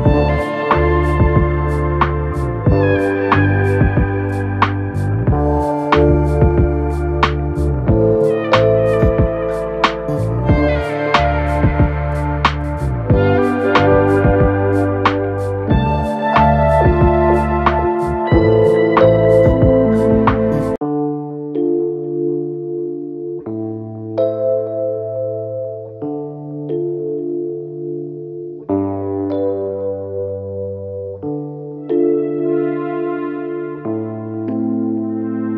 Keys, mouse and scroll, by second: 5.5 double click, 7.5 alt+click, 28.9 double click.